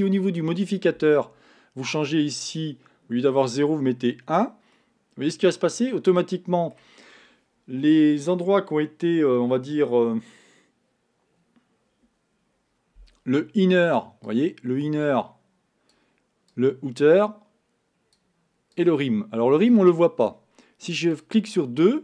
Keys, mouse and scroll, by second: 0.3-3.2 drag, 4.0 click, 4.8-7.8 middle drag, 14.3-22.0 drag.